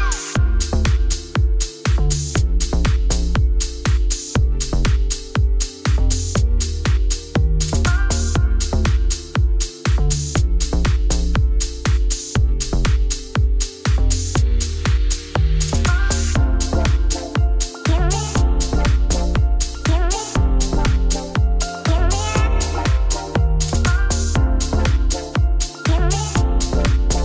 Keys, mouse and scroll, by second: 1.0 ., 1.4 r, 2.9 click, 3.9 shift+click, 9.0 s, 11.8 click, 12.1 scroll down 3, 12.3-14.0 middle drag, 14.0-14.3 scroll down 1, 14.3 shift+s, 14.9 shift+a, 15.3 scroll down 2, 15.4 s, 16.3 KP_1, 16.6 scroll up 4, 17.8-19.6 drag, 19.6 g, 20.5-21.6 scroll down 2, 21.6 n, 22.8 click, 23.2-24.4 scroll down 2, 24.4 KP_0, 24.7 KP_0, 25.2 g.